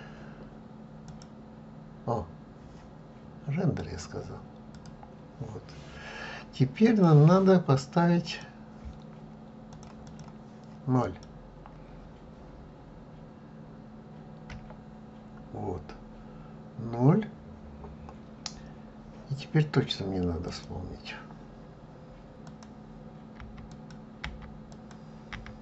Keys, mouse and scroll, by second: 1.2 click, 3.8 click, 4.7 click.